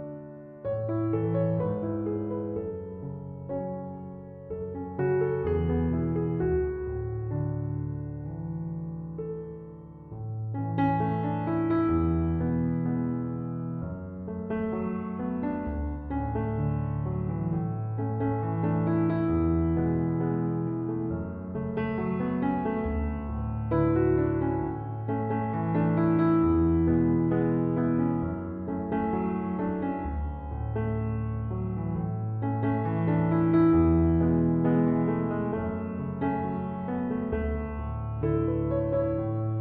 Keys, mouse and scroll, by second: 13.4-16.5 drag, 21.3 click, 25.7 click, 27.1 click, 32.8 click, 38.1-39.6 shift+middle drag.